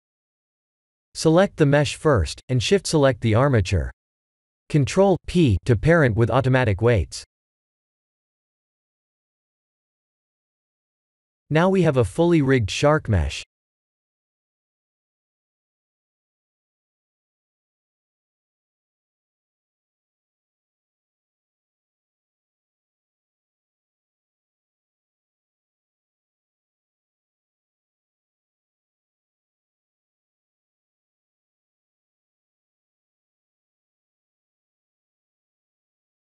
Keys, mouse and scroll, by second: 2.0 shift+click, 2.7 click, 3.2 click, 3.5 shift+click, 4.1 shift+click, 5.3 ctrl+p, 10.9 middle click, 12.1 middle click, 13.1 click, 15.6 click, 16.4 click, 16.9 click, 17.4 click, 18.0 KP_7, 19.1 r, 22.4 ctrl+z, 22.7 KP_1, 23.5 r, 26.4 ctrl+z, 26.5 shift+middle click, 27.1-28.1 scroll up 5, 28.1 click, 28.1 scroll up 1, 28.7 r, 33.8 ctrl+z, 35.1 click, 35.7 r.